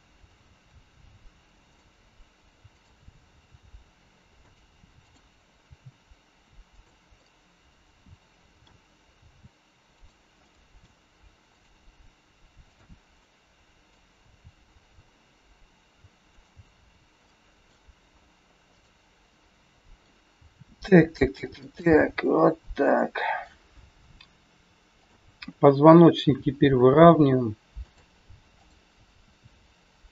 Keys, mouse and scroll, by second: 0.6 r, 2.7 click, 3.2 r, 4.8 click, 5.6 r, 7.1 middle click, 9.1 r, 10.4 middle click, 11.5 click, 13.2 middle click, 13.2 click, 14.2 r, 17.2 middle click, 17.2 scroll up 1, 18.6 click, 19.3 middle click, 20.3 r, 21.7 middle click, 25.0 click, 26.2 r, 28.5 click, 29.2 r.